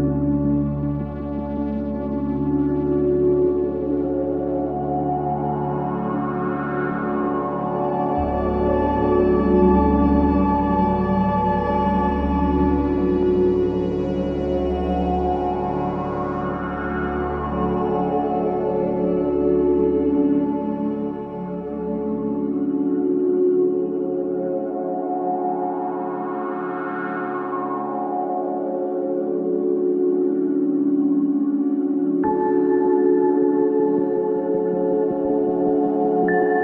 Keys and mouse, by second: 0.4 click, 2.7 click, 3.4-5.9 alt+drag, 6.6 alt+click, 7.1 click, 7.7-8.3 typing, 9.0-10.9 drag, 11.1 typing, 11.5-13.2 ctrl+alt+drag, 13.4 typing, 14.4 click, 14.9 click, 15.3 typing, 17.7 click, 18.4-18.7 typing, 19.3 click, 20.0-20.3 typing, 20.7 click, 21.2-22.9 alt+drag, 23.3-24.1 typing, 25.0-26.5 alt+drag, 27.1 click, 27.7-29.4 alt+drag, 29.7 alt+click, 30.5 ctrl+alt+click, 31.2 alt+shift+click, 31.8 alt+shift+click, 32.5 alt+shift+click, 32.9-36.6 ctrl+alt+drag.